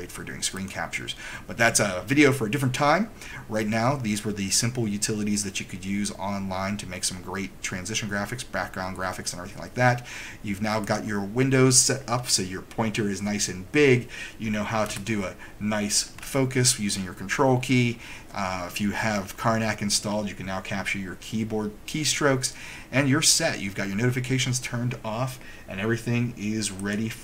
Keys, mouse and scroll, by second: 0.7 click, 11.0 click, 26.9 click.